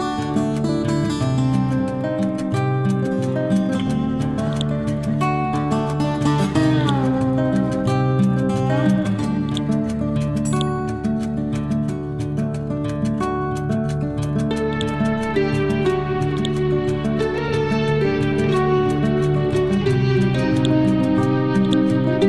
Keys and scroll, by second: 5.1 Left.